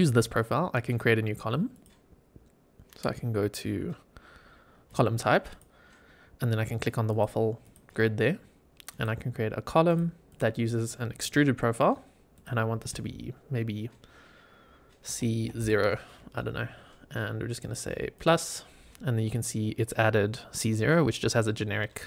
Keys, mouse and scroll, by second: 1.6-4.9 drag, 5.4-7.1 drag, 7.5-21.8 drag.